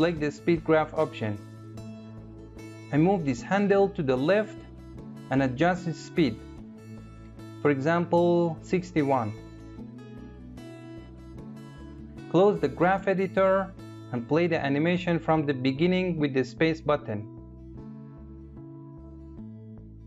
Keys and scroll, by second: 15.8 space.